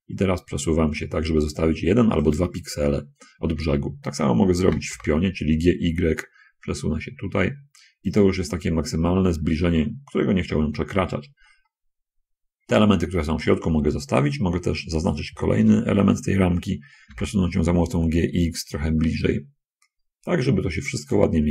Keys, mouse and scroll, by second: 3.6-4.0 scroll up 2, 5.0 g, 5.3 y, 9.0-10.0 scroll up 6, 10.9 middle click, 11.2 middle click, 16.0 l, 17.4 g, 17.9 x, 21.4 shift+click.